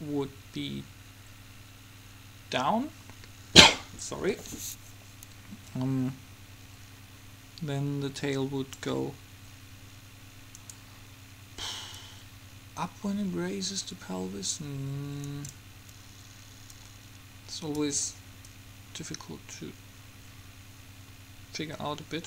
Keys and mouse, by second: 10.7-12.0 right drag, 12.0 middle click, 12.5-14.0 drag, 16.8-20.5 drag.